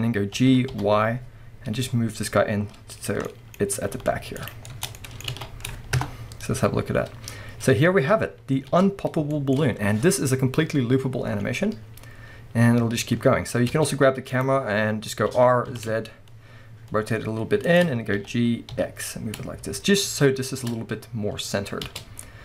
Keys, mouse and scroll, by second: 3.1 click, 3.3 middle click, 4.6 scroll down 2, 4.7 Tab, 4.7-6.1 middle drag, 5.3 alt+a, 6.0 KP_0, 7.3-8.2 scroll down 1, 8.2-8.7 scroll up 1, 8.7 space, 9.0 scroll up 1, 9.3 shift+middle click, 11.3 scroll down 1, 13.7 space, 14.3 click, 14.7-15.3 scroll up 1, 15.3 r, 17.7 shift+click, 18.2 g, 20.6 shift+click, 20.8-21.3 scroll up 2, 21.3 scroll down 2, 21.9 space.